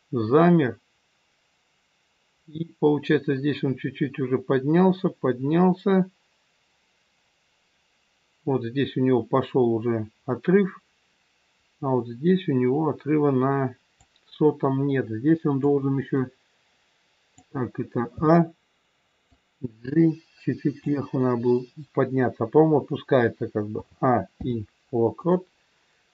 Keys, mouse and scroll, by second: 15.6 click, 18.1 a, 19.2 click, 23.7 a, 24.2 i.